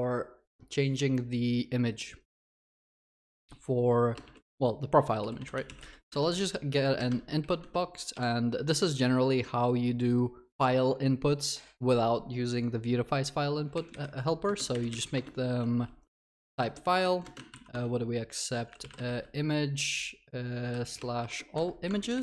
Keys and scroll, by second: 6.2 Tab, 15.2 Return.